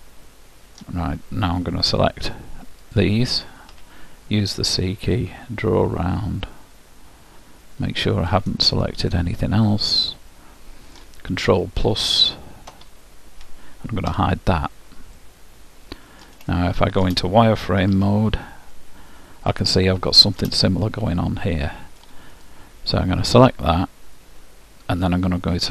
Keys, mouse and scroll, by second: 3.0-4.9 drag, 3.8 c, 8.8-10.6 right drag, 9.2-11.0 middle drag, 14.3 h, 15.3 middle click, 18.0 z, 18.5-22.4 middle drag, 22.6-24.1 drag.